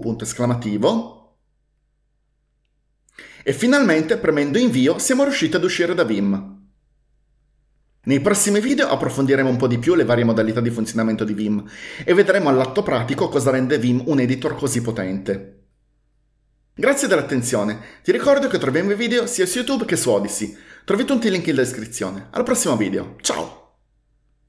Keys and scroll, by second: 0.0-0.5 typing, 4.8 Return.